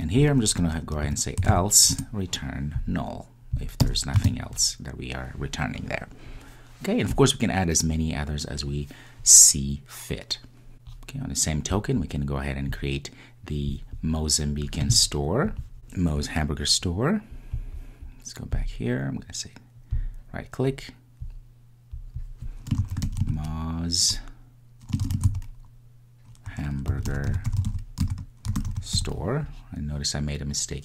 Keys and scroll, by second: 1.9 Return, 20.4 super+d.